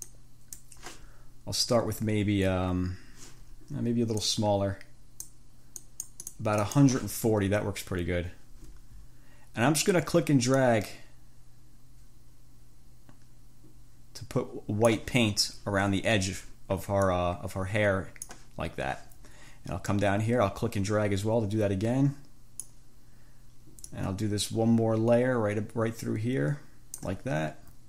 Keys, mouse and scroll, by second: 0.3 click, 4.4-5.7 drag, 6.0 click, 6.8 click, 10.9-15.3 drag, 17.3-18.7 drag, 20.1-23.1 drag, 24.1-27.4 drag.